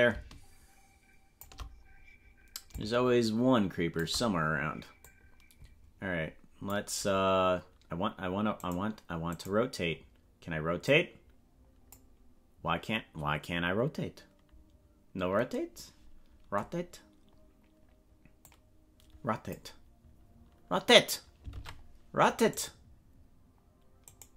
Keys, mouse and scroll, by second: 2.7-4.0 shift+drag, 5.0-6.8 drag, 8.6 right click, 9.4 right click, 10.8-12.0 drag, 18.4-19.6 drag, 21.6 ctrl+Tab, 22.5 right click, 24.0 right click.